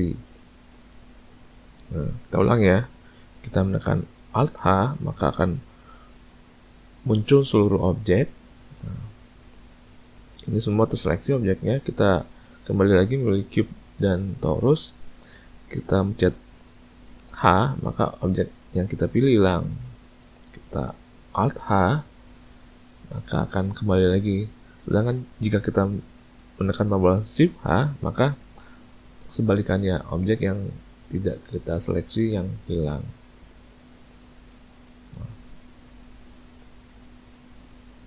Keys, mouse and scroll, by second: 4.7 alt+h, 6.0 middle click, 12.1 click, 14.7 shift+click, 17.5 h, 21.7 alt+h, 27.8 shift+h, 33.7 a, 33.9 a.